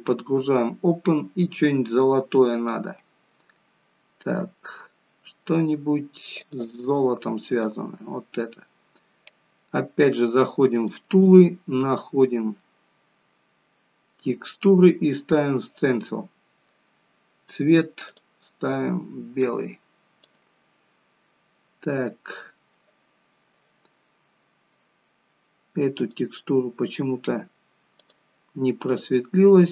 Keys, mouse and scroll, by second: 0.5 click, 10.8 click, 11.7 scroll down 2, 12.6-13.2 scroll down 11, 13.8-14.8 scroll down 3, 16.3-16.6 scroll up 5, 18.2 click, 24.6 scroll down 2, 26.0 click, 26.0 scroll down 1, 28.0 click.